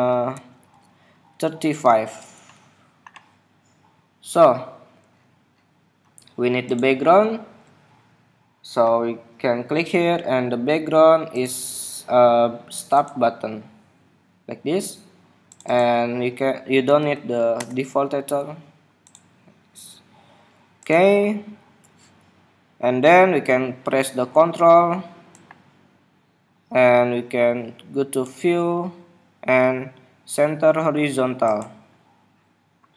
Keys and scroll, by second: 0.4 alt+Up.